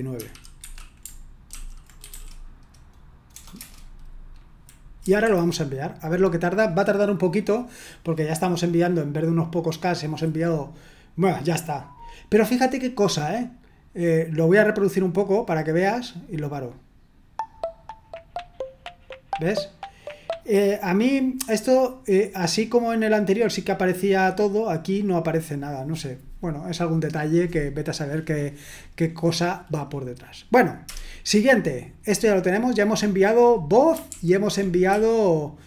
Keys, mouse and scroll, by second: 0.2-3.3 typing, 3.5 Return, 5.0 F5, 16.1 click, 20.3 click, 27.0 click, 30.8 Return, 34.1 ctrl+u, 34.9-35.6 typing.